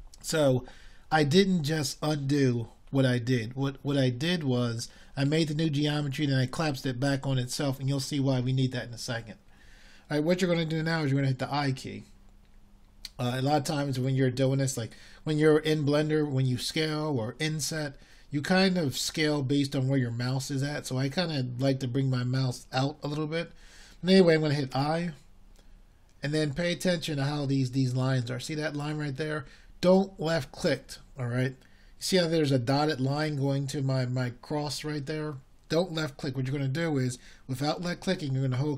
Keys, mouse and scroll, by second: 30.4 i.